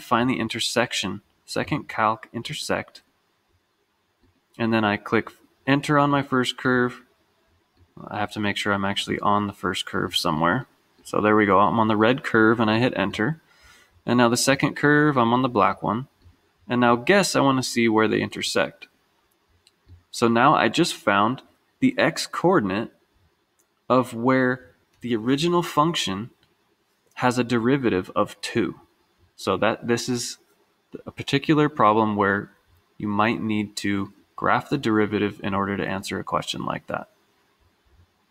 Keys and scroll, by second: 2.5 Down, 4.3 Return, 6.2 Return, 7.9 Right, 8.6 Right, 9.2 Right, 10.2 Right, 11.1 Right, 11.4 Right, 11.8 Right, 12.2 Right, 13.2 Return, 14.7 Right, 15.0 Right, 15.2 Right, 15.3 Right, 16.4 Return, 17.8 Left, 18.1 Left, 18.4 Left, 18.5 Left, 18.7 Left, 18.8 Left, 19.0 Left, 20.1 Return.